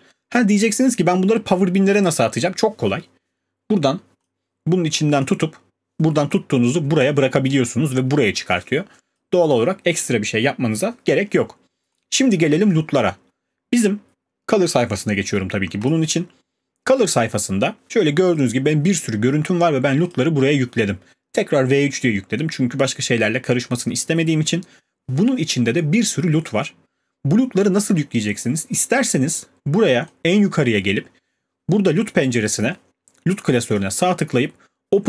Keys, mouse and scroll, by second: 0.8 click, 9.1 click, 9.5 click, 12.0 click, 18.3 click, 20.1 click, 30.9 click.